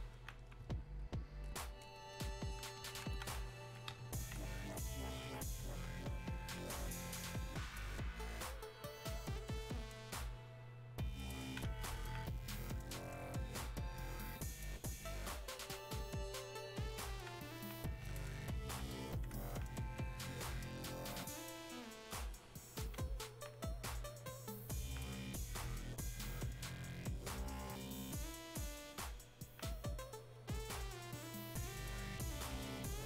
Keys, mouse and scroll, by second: 0.1-1.5 alt+drag, 4.6-17.6 alt+drag, 17.6-24.8 alt+drag, 24.8-33.0 alt+drag.